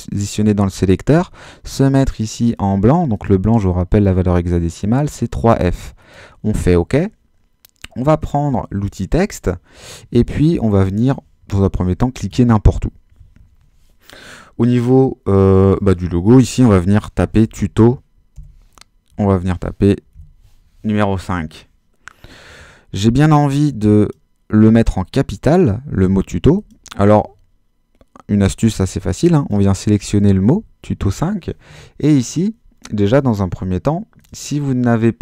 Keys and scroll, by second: 16.2-20.1 typing.